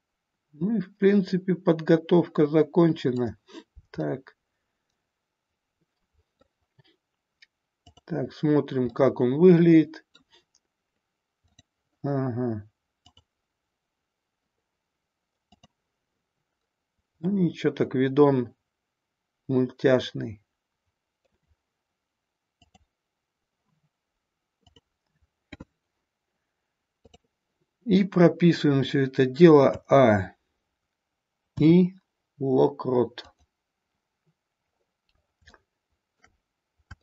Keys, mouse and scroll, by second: 4.0-6.3 middle drag, 7.8 click, 9.0-10.3 middle drag, 11.4 click, 13.4 click, 15.8 click, 17.4-21.4 middle drag, 22.8 click, 24.7 click, 27.1 click, 29.7 a, 31.4 i, 35.6-36.3 shift+middle drag, 36.9-37.0 shift+middle drag.